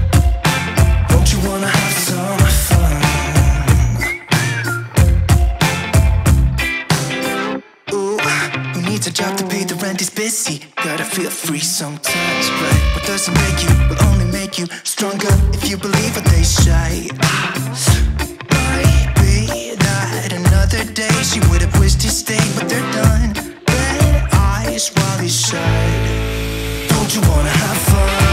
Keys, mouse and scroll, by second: 1.2-9.0 drag, 9.0-13.4 drag, 13.4 scroll up 1, 14.9 scroll down 1, 16.1 click, 19.5-22.7 typing, 24.0 click, 24.0 typing.